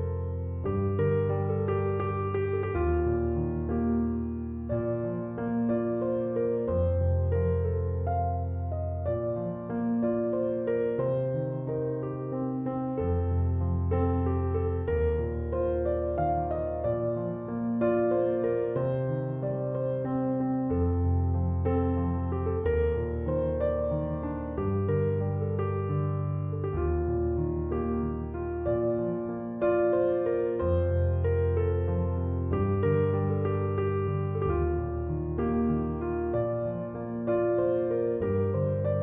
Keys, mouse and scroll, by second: 3.5 c, 3.7 o.